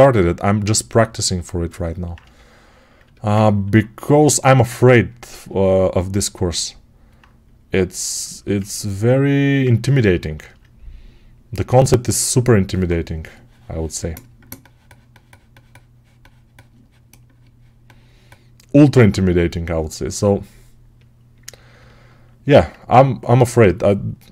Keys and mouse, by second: 7.0-17.8 right drag, 21.6 alt+right click, 22.5-24.3 drag.